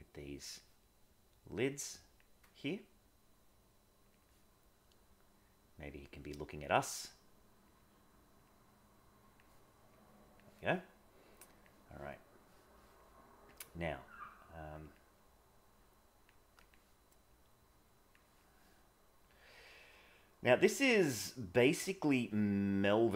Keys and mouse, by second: 1.4 click, 2.5 click, 3.6 click, 4.8 click, 6.0 click, 7.3 click, 7.8 click, 10.0 click, 11.3 click, 12.3 middle click, 13.5 click, 14.2 click, 14.4 click, 14.8 click, 15.4 click, 16.5 click, 17.3 click, 19.2 click, 19.5 click, 19.9 click, 21.7 click, 22.9 click.